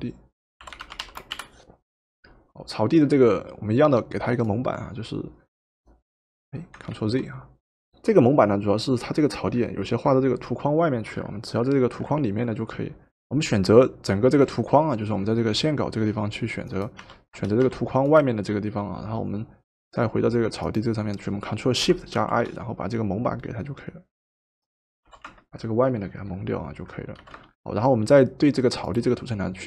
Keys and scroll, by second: 0.4-1.5 typing, 6.9 ctrl+z, 13.2 typing, 17.0 w, 17.7 w, 25.1 ctrl+shift+v, 27.2 v.